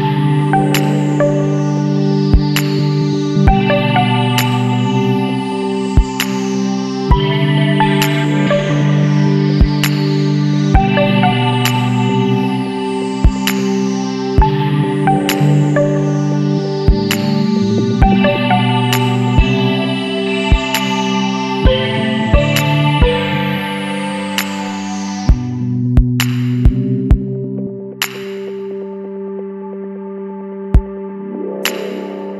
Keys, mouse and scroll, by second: 0.7 click, 5.1 click, 5.9 KP_3, 6.1 KP_0, 7.8 KP_Enter, 9.9-10.5 scroll down 4, 10.9 scroll up 2, 12.2 click, 12.7 space, 15.7 click, 18.1 click, 20.3 click, 22.3 click, 24.1 click, 27.8 click, 31.8 click.